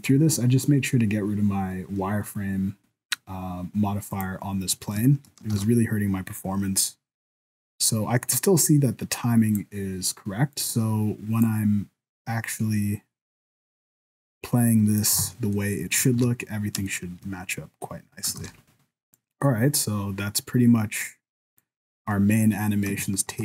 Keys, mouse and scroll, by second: 2.6 scroll down 1, 2.9-4.1 scroll up 1, 4.1 right click, 4.4 scroll down 3, 4.6 scroll up 2, 5.0 shift+middle click, 5.5 ctrl+s, 6.4 click, 10.6 click, 11.5 click, 15.2 alt+a, 15.5 middle click, 16.2 ctrl+s, 16.4 scroll up 5, 16.9 shift+middle click, 17.8-19.1 scroll down 6, 18.4 ctrl+s, 19.2 click, 21.9-22.5 scroll down 3, 22.4 scroll up 3, 22.6 middle click, 23.0 shift+middle click.